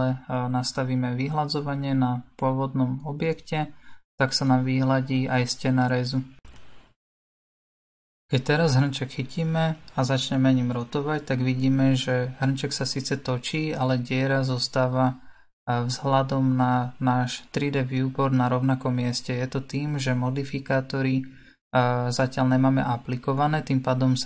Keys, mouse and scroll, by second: 4.2-6.3 middle drag, 6.3-9.1 scroll down 1, 9.1-13.2 middle drag, 13.2 click.